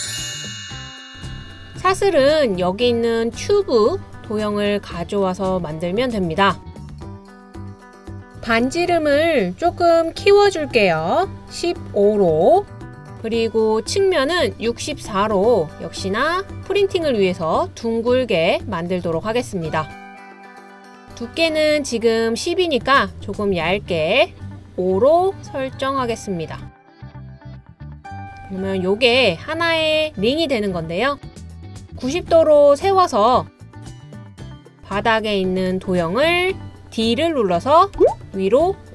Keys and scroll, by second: 11.4-11.9 typing, 12.5 Return, 14.5 typing, 38.0 d.